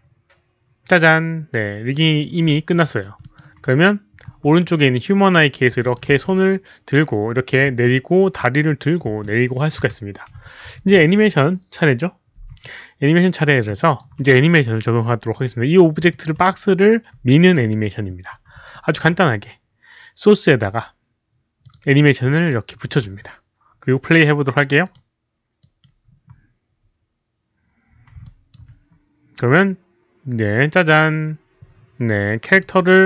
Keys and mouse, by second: 1.9 click, 2.5 alt+click, 2.8 alt+right drag, 3.2 alt+middle drag, 5.3 click, 5.8 alt+click, 6.1 w, 6.2-7.5 alt+middle drag, 7.5 alt+click, 7.5 alt+right click, 7.6 z, 8.6 alt+click, 9.0 w, 9.2-9.6 middle drag, 10.7 alt+click, 13.1-13.8 typing, 13.3 alt+middle drag, 13.7 alt+click, 16.1 alt+click, 18.7 alt+middle drag, 20.5 alt+middle click, 20.6 alt+click, 20.6 alt+middle click, 20.6 z, 21.6 click, 21.7 alt+middle click, 22.4 alt+click, 24.3 alt+middle click, 24.8 alt+click, 25.5 alt+click, 28.2 alt+click, 28.2 alt+middle click, 29.8 alt+click, 32.4 click, 32.7 alt+click.